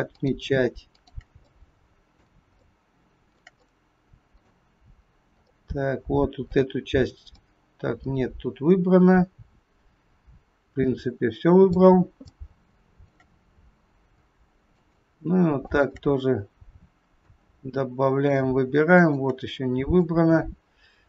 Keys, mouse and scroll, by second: 0.1 shift+click, 0.8 shift+click, 1.6 middle click, 2.6 shift+middle click, 3.8 middle click, 5.5 middle click, 12.4 shift+middle click, 13.5-14.1 scroll up 2, 14.7 shift+click, 15.6 shift+click, 17.3 middle click, 18.9 shift+click, 20.0 middle click.